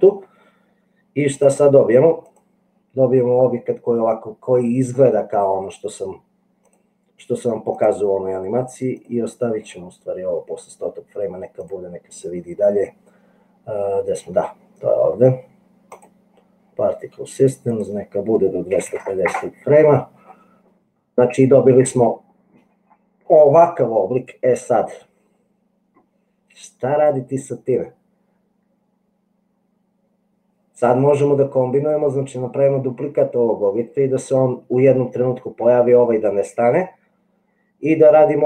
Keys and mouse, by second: 1.4 click, 6.7 click, 7.7 click, 11.6 click, 17.8-20.3 drag.